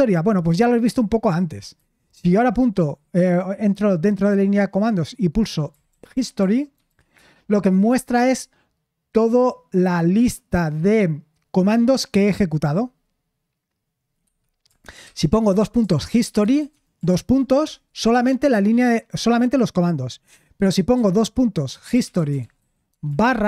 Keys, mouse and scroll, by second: 2.5 typing, 5.8-7.3 typing, 14.7-17.1 typing, 17.6 Return, 20.9-23.2 typing.